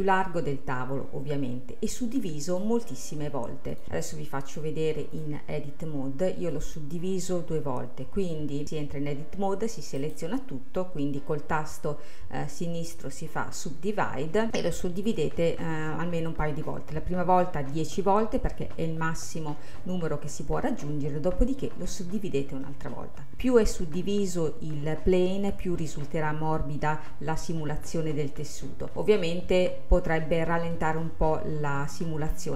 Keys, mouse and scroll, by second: 1.2-2.2 scroll up 1, 2.2 click, 2.9-3.8 scroll up 2, 3.8-5.8 drag, 5.8-6.5 scroll up 2, 6.5-8.6 middle drag, 8.6-9.5 scroll down 2, 10.1-13.3 right drag, 29.2-31.3 scroll up 1, 31.9-32.5 middle drag.